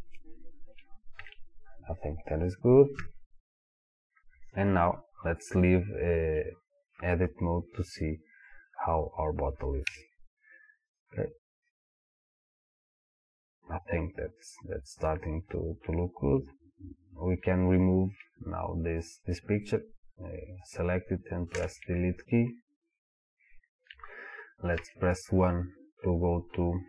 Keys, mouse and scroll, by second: 1.2 KP_1, 4.0 scroll down 1, 4.4-4.9 scroll up 1, 4.9-6.4 scroll down 1, 8.9-10.9 middle drag, 9.9 Tab, 10.9 click, 11.7-16.9 middle drag, 16.9 click, 21.6 Delete, 22.7-24.8 scroll down 1, 24.8 KP_1, 26.0 click.